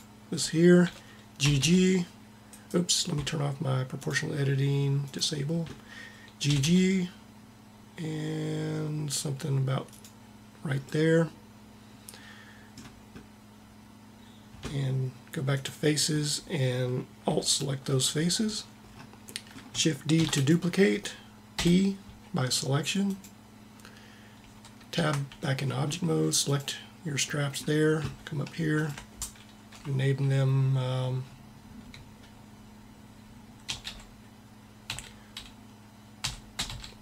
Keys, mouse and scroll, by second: 1.4 g, 6.5 g, 15.5-17.3 drag, 20.1 shift+d, 21.5 p, 25.0 Tab.